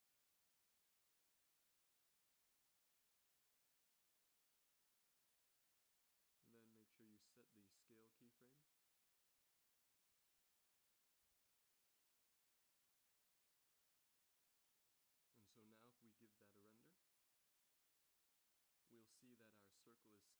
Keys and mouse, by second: 6.3 ctrl+c, 6.9 ctrl+v, 7.5 ctrl+v, 9.8 i, 15.2 z, 16.7 shift+Left, 17.3 Right, 17.5 Right, 17.7 Right, 17.9 Right, 18.0 Right, 18.2 Right, 18.4 Right, 18.6 Right, 18.7 Right, 18.9 Right, 19.4 Right, 19.5 Right, 19.7 Right, 19.9 Right, 20.2 Right.